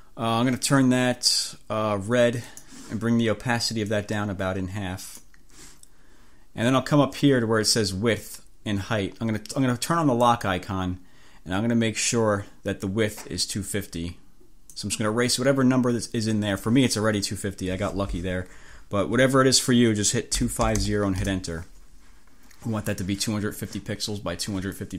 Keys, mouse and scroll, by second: 2.6 click, 3.9-5.5 drag, 10.4 click, 14.8-16.9 drag, 20.2-21.4 typing.